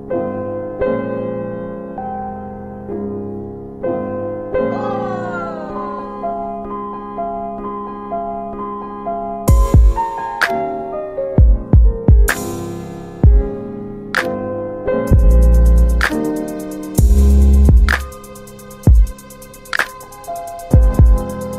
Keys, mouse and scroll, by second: 0.7 click, 1.6 middle click, 1.6-2.5 scroll down 2, 2.5 click, 3.2 alt+middle click, 3.5 F4, 4.5 alt+middle click, 9.3 right click, 11.3 click, 11.7 middle click, 11.7-12.3 scroll down 2, 12.8 alt+middle click, 14.2 alt+middle click, 14.9 scroll down 1, 15.3 middle click, 15.3 scroll up 2, 16.1 alt+middle click, 16.3-17.1 scroll up 1, 17.1 click, 17.9 typing, 19.2-20.5 typing, 19.9 click, 21.0 alt+middle click.